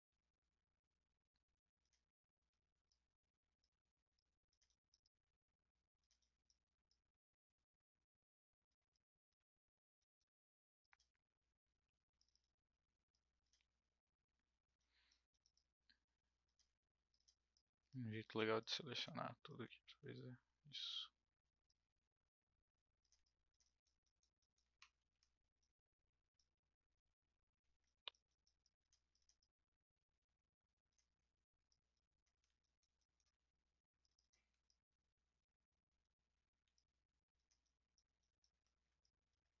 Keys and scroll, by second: 24.9 ctrl+z.